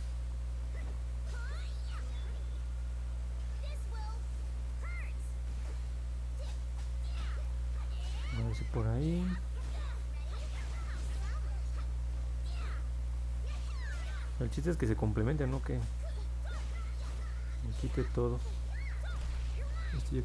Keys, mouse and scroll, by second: 0.2 click, 0.6 click, 0.9 click, 1.3 click, 2.3 click, 2.6 click, 2.9 click, 3.2 click, 3.7 click, 4.0 click, 4.3 click, 4.7 click, 4.9 click, 5.2 click, 5.5 click, 5.9 click, 6.2 click, 6.6 click, 8.4-9.5 alt+drag, 10.3 click, 10.8 click, 11.6 middle click, 11.9 middle click, 12.6 middle click, 14.2 alt+click, 17.1 click.